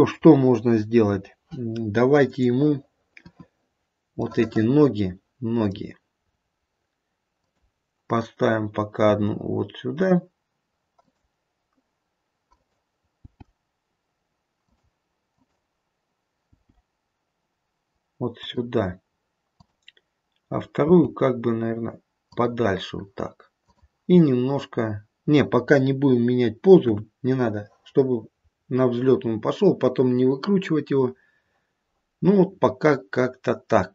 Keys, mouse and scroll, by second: 2.3 click, 3.2 KP_1, 4.3 middle click, 5.5 middle click, 6.2 middle click, 6.2-7.4 scroll up 2, 7.4 click, 7.4-8.6 scroll up 2, 8.6 click, 9.0 g, 10.9 click, 13.4 click, 13.4 g, 15.2 click, 16.6 g, 19.6 click, 20.8 g, 23.7 click, 26.8 KP_1, 28.5-29.7 scroll down 3.